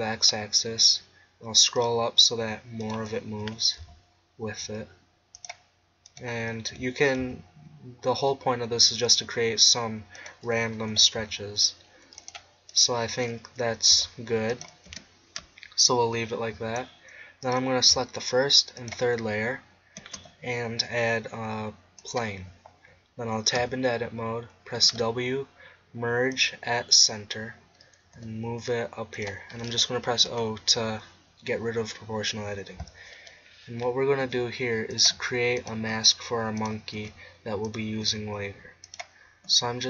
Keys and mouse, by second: 1.9-2.9 drag, 3.5 g, 6.7 g, 9.2 click, 10.9 g, 11.2 click, 12.3-12.8 drag, 13.6 g, 14.6 click, 14.9 Tab, 20.0 shift+a, 23.6 Tab, 24.8 w, 28.2 g, 29.2-31.2 drag, 30.3 o, 34.2 e, 35.1 e, 35.9 e, 37.0 e, 38.0 e, 39.5 e.